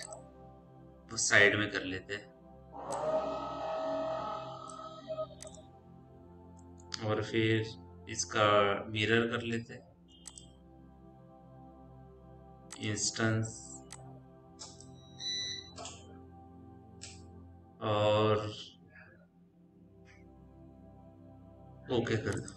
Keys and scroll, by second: 1.5 f.